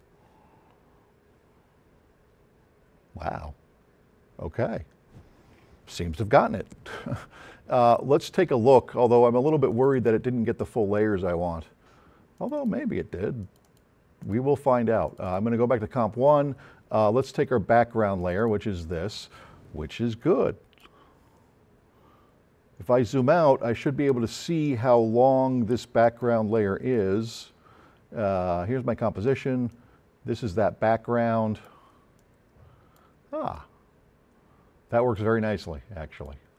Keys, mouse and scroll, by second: 9.7 click, 9.9 click, 12.4 click, 13.5 click, 14.3 click, 15.1 click, 17.3 click, 18.2 click, 22.3-22.7 scroll down 2, 22.9 scroll up 1, 25.0-26.3 drag, 29.7-30.9 drag, 31.4 click, 36.2 click.